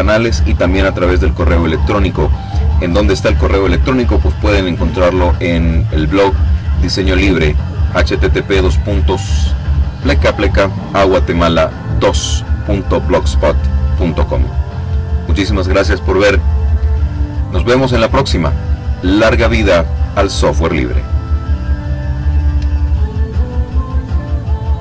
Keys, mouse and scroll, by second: 21.0 click.